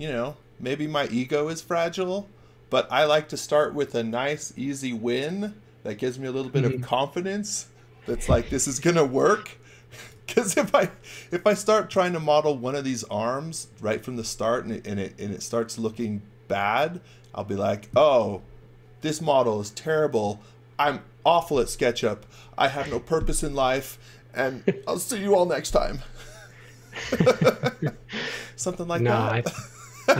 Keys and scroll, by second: 9.6-10.6 typing, 15.8 x.